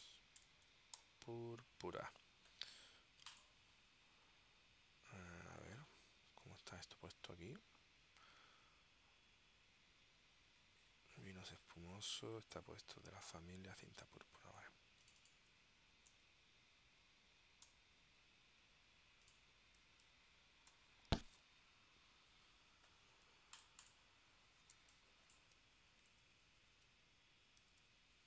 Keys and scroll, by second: 0.5 BackSpace, 1.1 u, 5.7 super+Tab, 16.2 BackSpace, 17.8 p, 20.2 BackSpace, 20.9 l, 24.9 space, 26.2 super+Tab, 27.9 Tab.